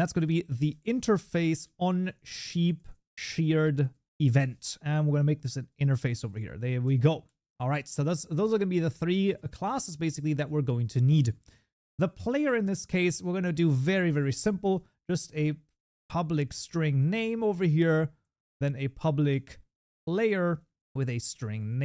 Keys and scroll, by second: 14.8 Tab, 20.6 Tab.